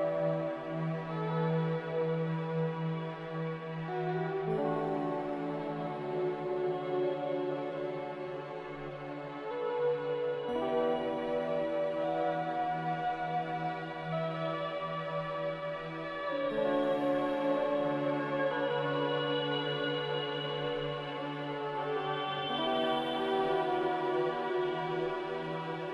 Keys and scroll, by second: 1.8 a, 11.5 b, 13.3 a, 17.6 f, 22.2 a.